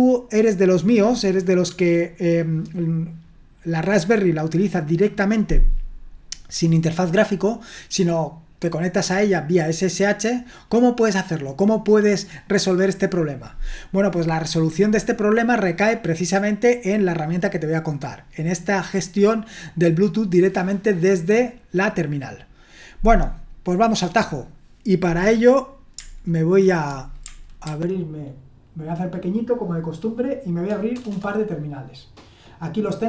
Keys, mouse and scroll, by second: 27.6 ctrl+1, 30.9 super+Return, 31.1 super+Return.